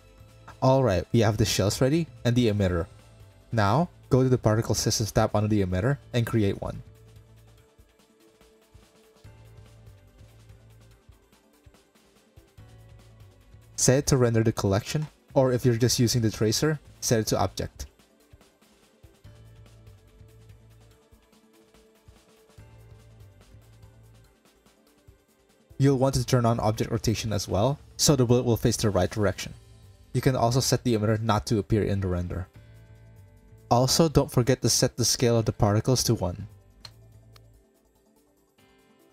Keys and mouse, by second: 2.4 KP_Decimal, 5.4 click, 7.1 click, 7.6 drag, 7.7 click, 8.2 middle click, 10.0 space, 11.4 click, 12.4 click, 24.7 click, 27.8 click, 29.4 click, 29.8-30.3 middle drag, 32.7 middle click, 35.3-38.2 middle drag.